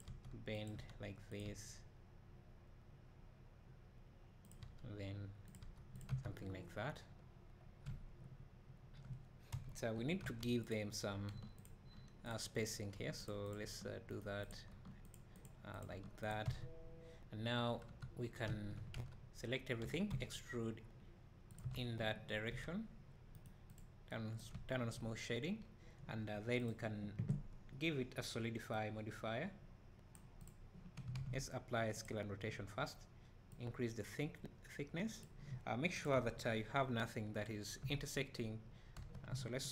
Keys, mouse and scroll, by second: 6.1 Tab, 6.4-7.9 scroll down 2, 9.5 KP_1, 9.9-10.2 scroll up 2, 10.2 Tab, 10.7 click, 11.3 g, 12.6 click, 13.0 g, 13.5 click, 13.7 g, 14.2 right click, 14.5 click, 14.7 g, 15.1 click, 15.9 g, 16.5 Tab, 18.2 scroll down 2, 18.5 `, 19.0 a, 19.8 e, 21.6 Tab, 23.8-30.4 right drag, 24.5 `, 25.1-25.6 scroll up 2, 25.6 scroll down 2, 30.4-36.0 drag, 31.0-32.0 scroll up 1, 36.1 KP_1, 36.5-37.2 scroll up 2, 37.8 Tab, 39.0 a.